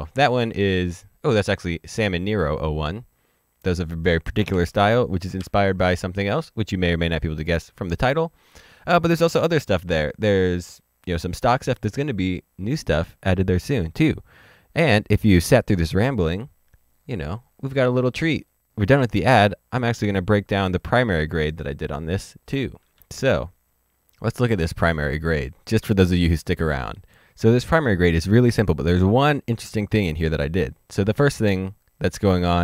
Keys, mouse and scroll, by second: 0.8 typing, 4.1 d, 5.4 ctrl+d, 6.6 typing, 18.4 click, 20.4 click, 22.1 click, 22.4 d, 22.7 click, 23.0 ctrl+d, 23.3 click, 23.9-25.0 scroll up 2, 25.0 scroll down 1, 25.4 middle click.